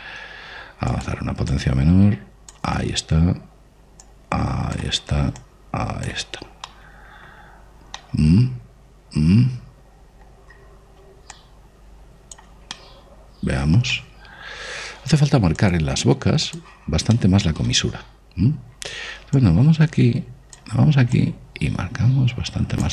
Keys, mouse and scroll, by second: 0.4 shift+f, 2.3 click, 4.8-8.1 drag, 7.4 middle click, 8.0-10.6 middle drag, 12.1 click, 13.5-17.1 middle drag, 16.4 click, 17.9-20.2 middle drag, 20.2-22.9 drag.